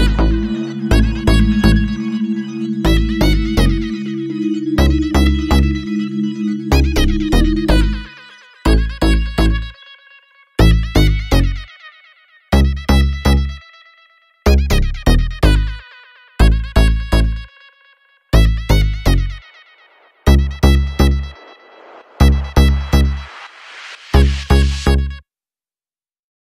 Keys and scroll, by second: 8.2 3, 8.3 Return, 9.0 3, 9.1 Return.